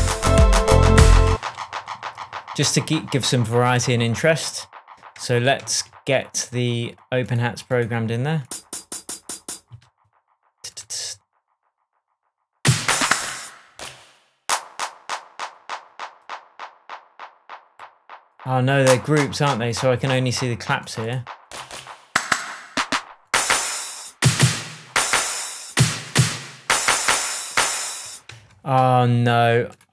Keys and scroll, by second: 1.2 space, 5.5 shift+Tab, 28.2 shift+Tab.